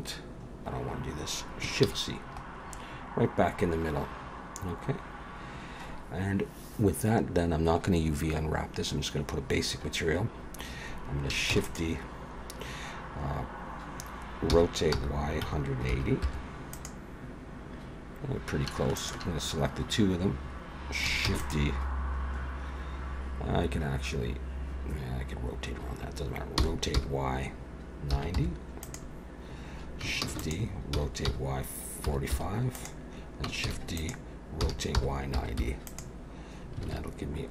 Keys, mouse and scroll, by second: 1.8 shift+c, 2.3-3.6 scroll up 6, 3.6-4.9 scroll down 1, 4.9-5.9 scroll down 3, 11.5 shift+d, 14.5 r, 19.0 shift+click, 21.3 shift+d, 26.6 r, 30.2 shift+d, 30.9 r, 33.7 shift+d, 34.6 r, 36.9 alt+a, 37.2-37.5 scroll down 2.